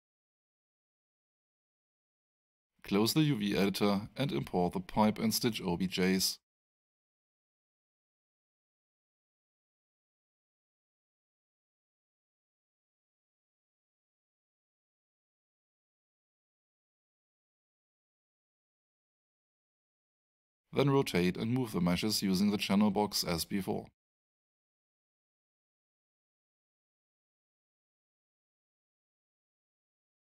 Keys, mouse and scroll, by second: 2.0 click, 7.8 click, 8.0 double click, 10.3 click, 13.9 click, 14.1 double click, 16.8 click, 18.7 shift+click, 23.2 click, 24.2-24.9 typing, 25.6 Return, 27.0 click, 27.6-29.0 typing, 29.1 Return.